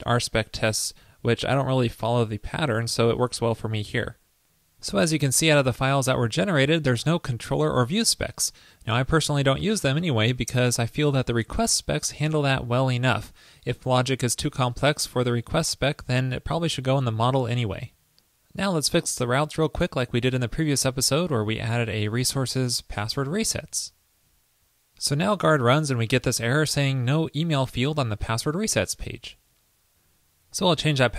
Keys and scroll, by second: 22.3 super+v, 23.7 super+s.